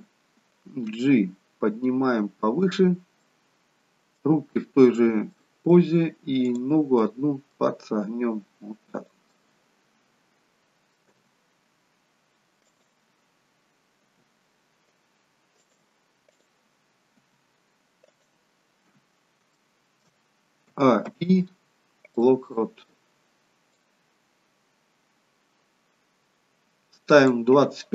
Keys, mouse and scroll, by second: 0.9 g, 3.2 middle click, 5.4 middle click, 6.5 click, 7.1 middle click, 8.2 g, 9.5 middle click, 12.4 g, 14.1 r, 16.3 click, 17.2 r, 18.6-19.3 scroll down 1, 19.3 scroll down 1, 19.6 shift+middle click, 20.8 a, 21.1 i.